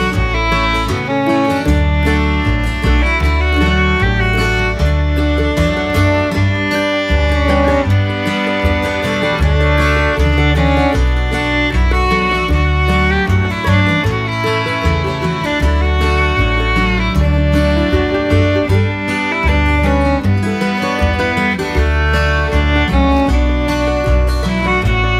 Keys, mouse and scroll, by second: 0.1 shift+middle click, 1.8 shift+middle click, 4.2 click, 6.4 click, 8.2-9.9 drag, 12.7 click, 15.3 click, 17.0-20.0 drag.